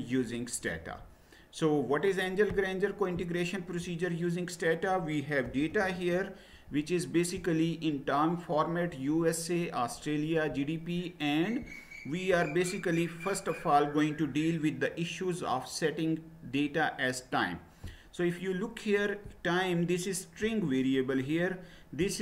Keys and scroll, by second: 5.4 typing, 5.9 Return.